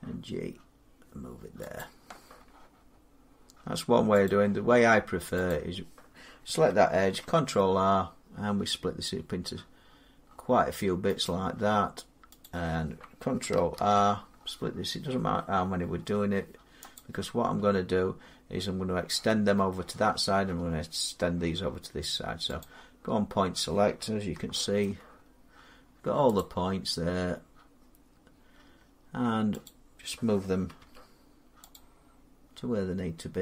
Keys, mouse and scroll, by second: 1.6 click, 4.1 click, 5.3 click, 6.8 ctrl+r, 7.8-8.5 scroll, 9.2-10.9 scroll, 11.1 click, 12.3 click, 13.6 ctrl+r, 14.1-16.6 scroll, 16.8 click, 21.2 middle click, 22.5 click, 24.7 shift+middle click, 25.1 middle click, 26.2 shift+middle click, 26.2 click, 29.5 click, 30.6 g, 31.6 click.